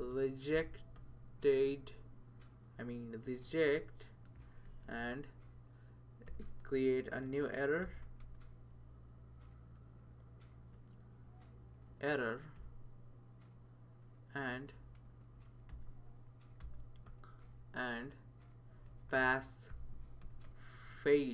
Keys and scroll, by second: 0.0-1.5 typing, 2.7 Return, 3.5 BackSpace, 3.7 BackSpace, 4.7 typing, 6.0-8.2 typing, 10.3-13.1 typing, 14.5-17.1 typing, 18.6-21.3 typing.